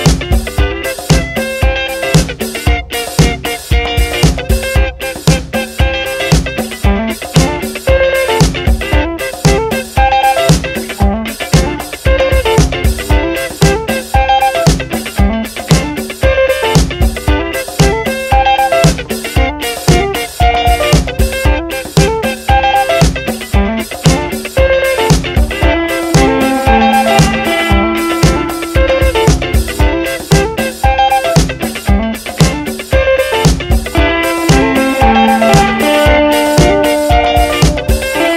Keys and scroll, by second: 0.0-0.4 typing, 18.1 Up, 19.0 v, 19.2 Right, 19.5 Down, 22.4 ctrl+t, 26.5 Return, 26.8 Up, 29.7 Down, 31.9 t.